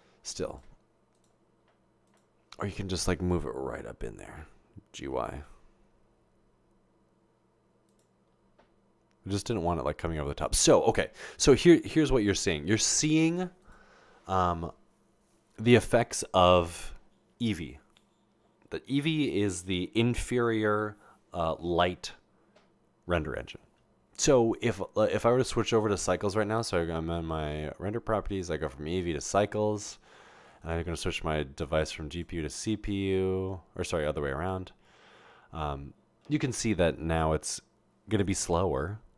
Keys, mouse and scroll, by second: 5.2 typing, 12.3 0, 29.1 click, 30.6 click, 32.1 click.